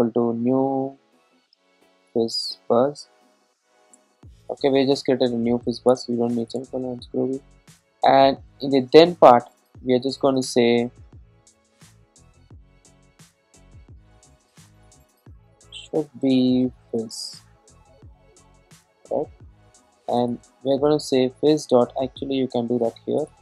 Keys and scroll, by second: 4.0 Return, 20.2 Return.